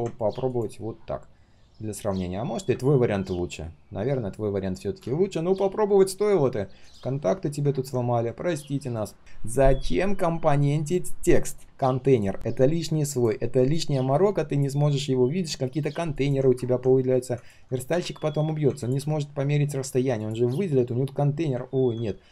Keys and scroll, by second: 18.3 ctrl+shift+3.